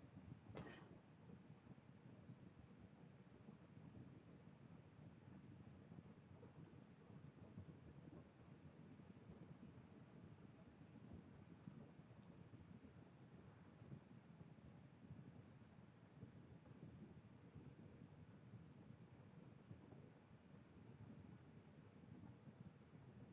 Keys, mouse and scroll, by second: 12.1 click, 13.5 click, 15.9 click, 19.9 click, 21.2 scroll, 21.9 scroll.